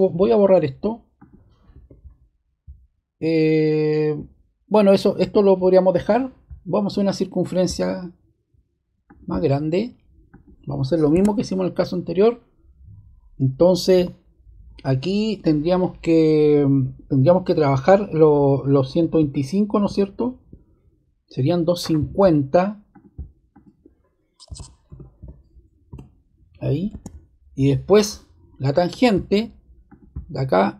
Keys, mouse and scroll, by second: 1.1 click, 1.7 BackSpace, 7.4 click, 9.0 click, 10.2 click, 11.1-11.6 scroll, 13.9 d, 22.9 click, 23.5 click, 24.2-25.6 typing, 25.8 Return, 26.9 ⟲, 28.8 click, 29.8 click.